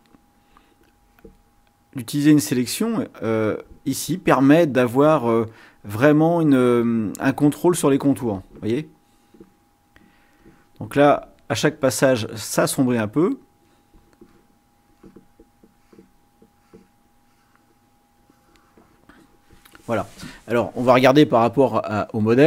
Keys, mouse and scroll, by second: 0.9 click, 2.1-3.8 drag, 4.9-7.5 drag, 9.1 click, 10.4 click, 12.1-13.2 drag, 13.6 click, 14.9 click, 15.8 click, 16.4 click, 17.2-19.1 drag, 22.4 click.